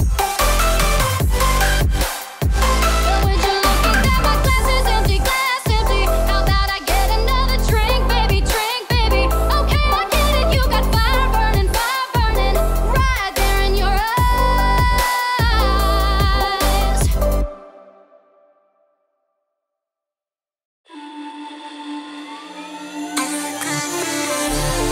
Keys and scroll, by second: 0.7 ctrl+t, 5.6 ctrl+t.